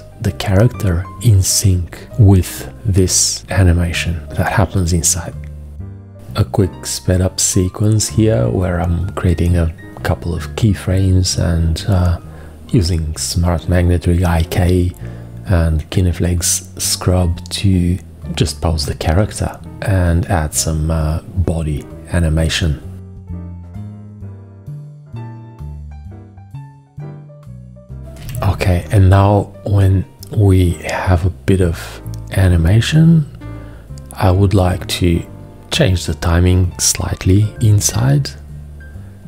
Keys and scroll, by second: 6.0 x, 7.6 x, 10.0 x, 15.8 x, 18.2 alt+4, 22.6 F1, 23.5 Return, 28.2 v, 37.2 c.